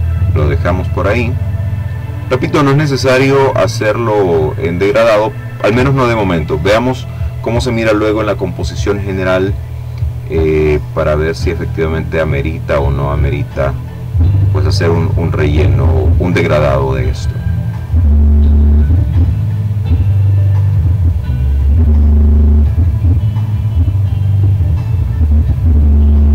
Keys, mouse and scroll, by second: 1.1-3.0 drag, 4.6 click, 5.3 click, 7.3 click, 8.7-10.0 drag, 10.5-11.7 drag, 12.0 click, 13.0-14.0 drag, 17.2-18.9 drag, 19.1-21.5 drag, 22.0-23.6 drag, 23.8-25.4 drag, 25.5-26.3 ctrl+scroll down 2.